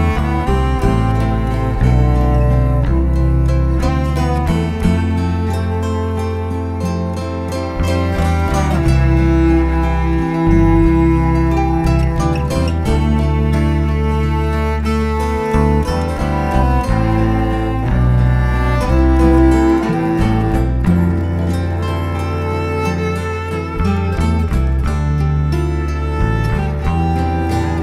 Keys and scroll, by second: 3.5 shift+super+g, 8.1 shift+super+t, 9.4 shift+super+t, 14.3 shift+Right, 14.6 shift+Up, 16.3 shift+Up, 17.0 shift+Right, 21.9 shift+super+l, 23.5 shift+Return, 24.8 shift+super+a, 25.1 shift+super+c, 25.2 shift+super+v, 26.3 shift+super+a.